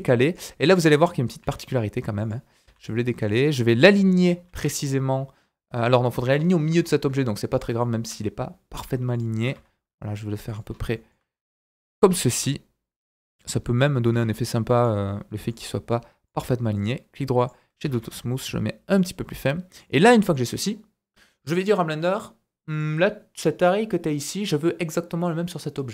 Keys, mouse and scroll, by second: 1.4 g, 2.6 s, 3.8 click, 4.5 Tab, 6.2 Tab, 6.3 scroll up 3, 6.8 shift+middle click, 7.5 click, 7.6 right click, 7.8 shift+middle click, 8.7 s, 9.3 s, 10.7 scroll up 1, 10.9 shift+middle click, 12.1 g, 14.1 s, 15.3 g, 16.2-19.9 drag, 16.7 right click, 17.9 shift+s, 19.2 scroll down 1, 19.3 middle click, 19.9 scroll down 1, 20.1 middle click, 20.5-22.1 scroll down 1, 22.7 click, 25.2 click.